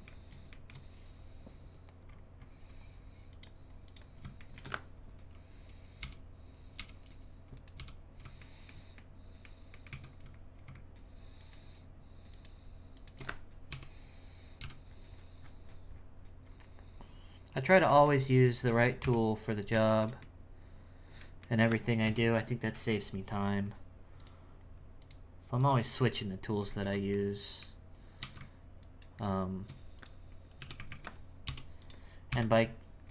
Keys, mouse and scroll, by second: 0.5-2.1 shift+middle drag, 2.1-3.3 scroll up 3, 3.3 click, 3.8 click, 4.4-6.0 shift+middle drag, 7.5 right click, 8.4-9.9 shift+middle drag, 9.9 z, 11.4 alt+shift+right click, 12.3 alt+shift+right click, 13.0 alt+shift+right click, 13.7 KP_7, 19.0 KP_1, 19.9-21.6 shift+middle drag, 21.6-22.0 scroll down 3, 22.0 KP_1, 24.2 click, 25.0 click, 25.6 click, 26.2-26.8 scroll up 3, 26.8 alt+a, 27.1-28.2 middle drag, 28.8 alt+right click, 30.0 click, 32.3 KP_1.